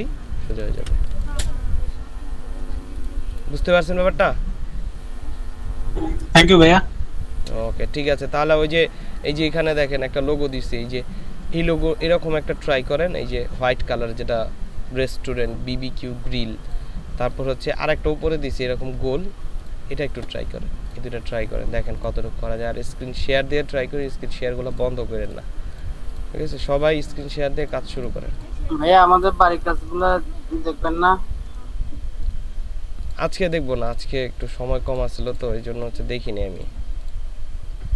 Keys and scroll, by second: 0.3 ctrl+space, 3.4 ctrl+space.